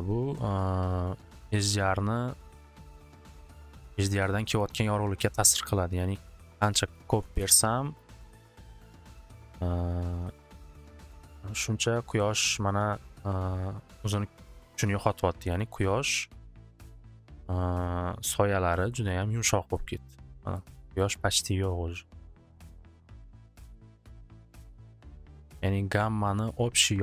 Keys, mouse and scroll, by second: 3.0 click, 6.9 click, 6.9 click, 7.1 2, 7.4 Return, 8.0 click, 8.3 Return, 15.7-17.8 middle drag, 19.1 middle click, 19.7 middle click, 20.7 middle click, 21.1 middle click, 21.7 middle click, 25.5 click, 25.6 click.